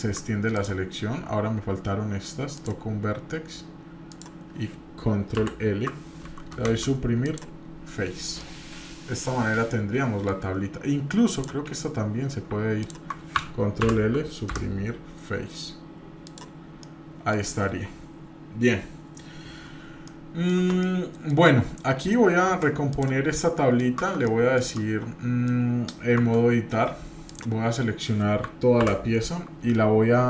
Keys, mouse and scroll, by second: 0.5-5.8 ctrl+drag, 6.7 Delete, 8.2 scroll down 1, 8.4-10.4 middle drag, 10.6 scroll up 1, 11.3 click, 12.8 ctrl+click, 13.8 ctrl+l, 14.5 Delete, 16.8 middle click, 20.1 shift+middle click, 20.8 middle click, 22.5 Tab, 22.9 click, 23.4 middle click, 24.2-25.5 shift+middle drag, 26.2 Tab, 27.2 click, 28.8 ctrl+l.